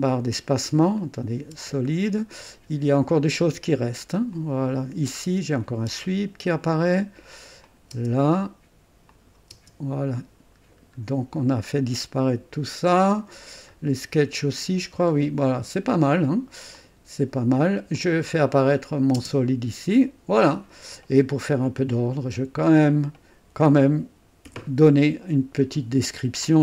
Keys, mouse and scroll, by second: 1.0 click, 1.5 space, 4.3 click, 5.8 space, 7.6 click, 7.9 space, 9.1 click, 9.5 space, 10.3-10.8 scroll down 1, 13.8 scroll up 1, 14.8 scroll down 2, 15.5 scroll up 2, 16.7 click, 17.9 click, 19.1 space, 22.6 click, 24.4 F2.